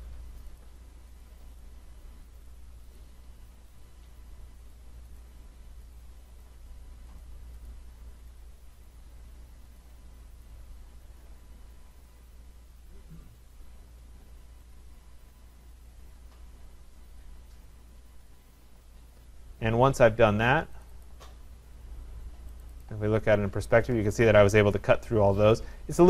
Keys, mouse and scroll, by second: 0.0 click, 0.2 scroll, 0.6 click, 1.2 click, 1.7 click, 2.5 click, 3.0 click, 3.8 click, 4.7 click, 5.2 click, 6.0 click, 6.4 click, 7.2 click, 7.7 click, 8.4 click, 8.9 click, 9.8 click, 10.4 click, 11.2 click, 13.6 click, 14.8 click, 15.9 click, 17.2 click, 18.3 click, 20.9 click, 21.1 click, 22.6 click, 22.8 click, 23.4 middle click, 23.7 middle click, 25.1 middle click, 25.2 middle click, 25.9 middle click.